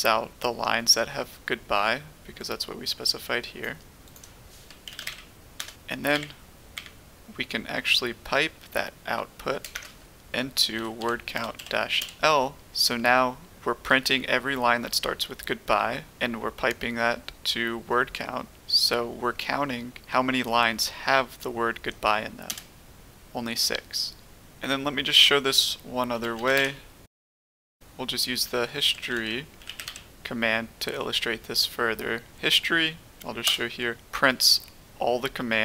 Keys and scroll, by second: 4.6-5.5 typing, 5.5 Return, 6.7 Up, 9.3-12.6 typing, 22.4 Return, 26.0-27.0 typing, 27.5 Return, 28.7-30.3 typing, 33.4 Return.